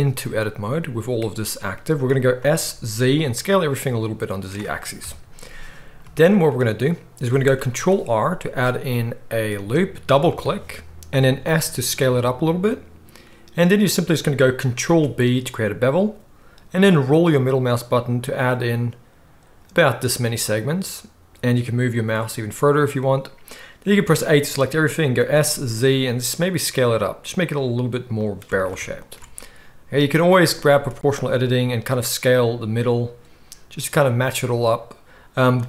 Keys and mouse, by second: 2.4 s, 4.4-8.1 middle drag, 5.0 KP_1, 7.7 ctrl+r, 11.2 s, 14.9 ctrl+b, 24.1 a, 25.2 s, 28.5 alt+a, 30.1 click, 30.6 s.